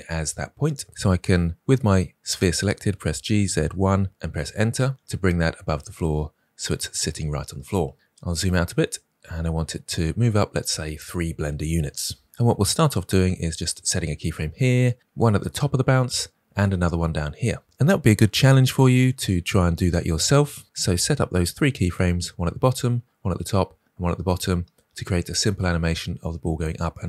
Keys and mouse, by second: 2.9 g, 8.9-10.0 shift+middle drag, 10.1 typing.